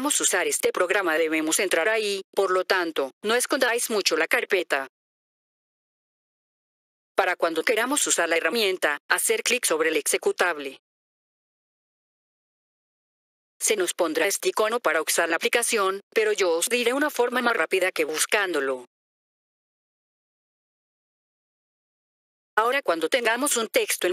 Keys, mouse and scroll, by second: 1.6 click, 6.4 F4, 7.1 click, 13.6 click, 16.0 click, 18.6 right click, 22.5 click.